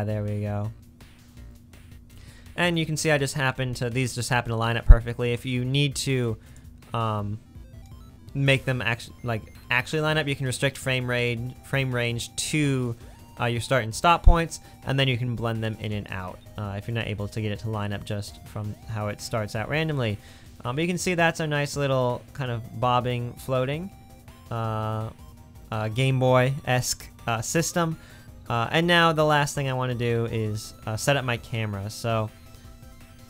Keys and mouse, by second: 2.6 space, 16.2 space, 23.7 space, 27.6-31.2 middle drag, 32.5 space.